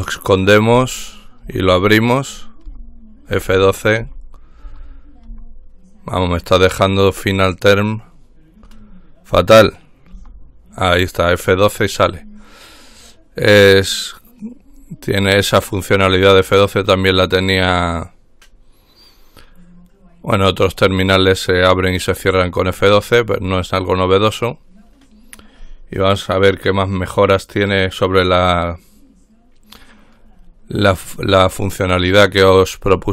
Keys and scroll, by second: 0.9 F12, 1.6 F12, 2.8 F12, 3.5 F12, 4.2 F12, 4.8 F12, 5.5 F12, 10.4 F12.